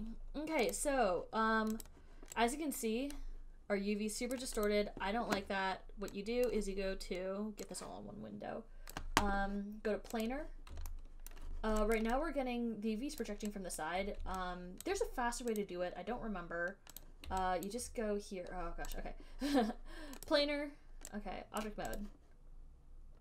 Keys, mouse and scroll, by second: 0.2 click, 1.1 click, 2.2 click, 4.6 right click, 5.0 click, 6.9 click, 8.0 right click, 8.1 click, 9.2 right click, 10.5 click, 11.6 alt+scroll, 12.9 alt+right click, 13.5 alt+click, 14.1 alt+click, 14.3 alt+middle click, 15.1 alt+click, 15.8 click, 17.3 click, 18.0 alt+right click, 18.0 click, 19.3 click, 19.6 alt+middle click, 20.6 click, 21.9 click, 22.3 click.